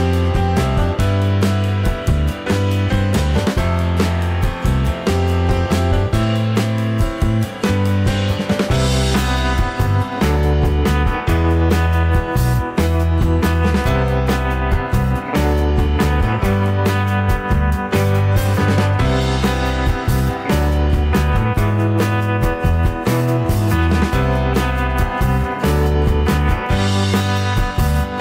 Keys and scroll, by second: 26.0 ctrl+z.